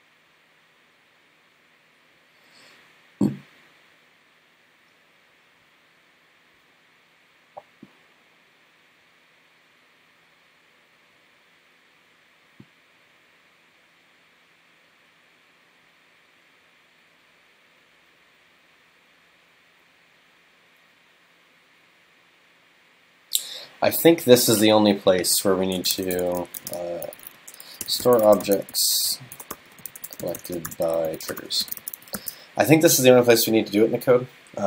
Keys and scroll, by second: 32.2 super+s.